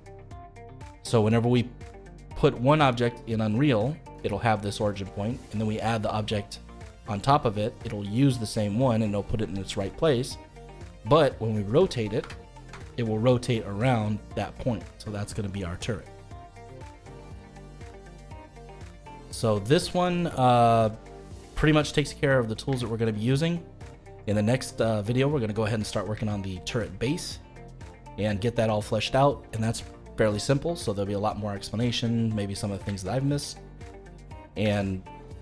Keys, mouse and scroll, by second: 0.5 click, 10.6 click, 12.2 r, 17.6 scroll down 2, 17.9-20.9 middle drag, 22.4-22.8 scroll up 2, 22.8-25.8 shift+middle drag, 25.8-26.2 scroll down 2, 26.2-29.7 shift+middle drag, 32.7-33.0 scroll down 1, 33.0-34.4 shift+middle drag, 34.4-34.8 scroll up 2, 34.8-35.4 shift+middle drag.